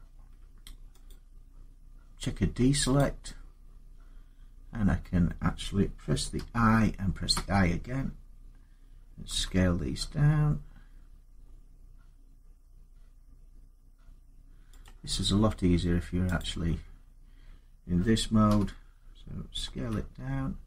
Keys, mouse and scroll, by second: 0.9 click, 2.7 click, 6.2-7.1 typing, 9.1 s, 10.3 typing, 12.0 click, 14.7 click, 16.2 click, 17.1 typing, 18.2 i, 19.5 s.